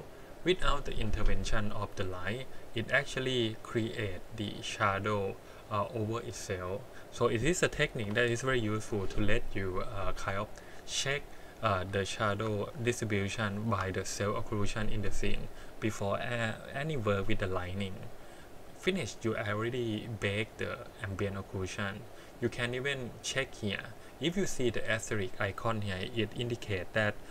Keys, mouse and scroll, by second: 7.2-7.9 scroll down 2, 8.0 KP_1, 12.2 shift+middle click, 12.6 scroll down 2, 13.5 shift+middle drag, 22.2-25.2 drag.